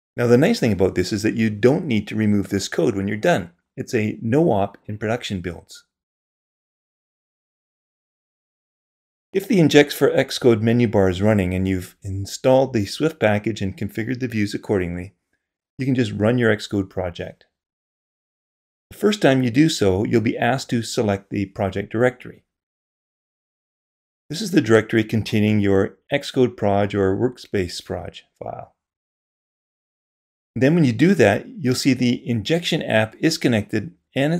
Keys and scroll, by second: 1.0 super+v, 1.2 super+b.